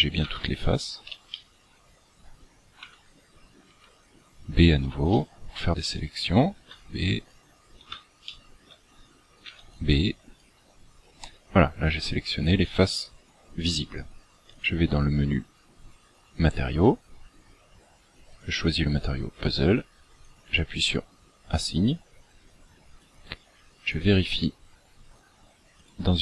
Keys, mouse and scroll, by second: 0.2 b, 1.3 shift+middle click, 2.7 b, 3.6 b, 5.1 shift+middle click, 6.6 b, 8.3 shift+middle click, 9.5 b, 10.9-11.5 scroll down 8, 14.5 click, 18.3 click, 20.2 click, 23.0 click, 25.7 click.